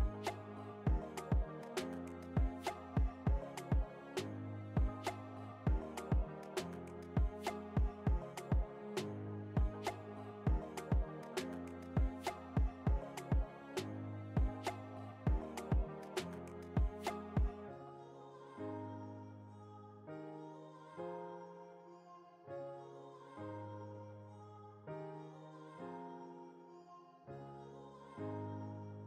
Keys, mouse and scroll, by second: 0.1 alt+scroll up 1, 1.3-4.2 drag, 4.0-4.3 scroll up 2, 4.6 Return, 5.4 scroll down 2, 6.8 alt+scroll up 1, 9.3 t, 9.9 click, 11.7 shift+4, 16.1 click, 16.6 alt+scroll up 1, 17.2 alt+scroll up 1, 18.0 click, 21.0 ctrl+t, 21.8-23.2 alt+shift+drag, 24.6 Return, 25.9 click, 28.6-29.0 scroll up 1.